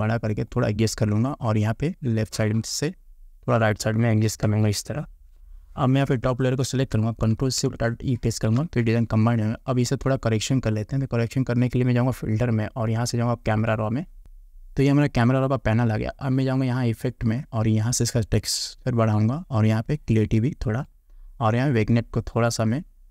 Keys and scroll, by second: 4.5 Return, 8.3 ctrl+alt+shift+e.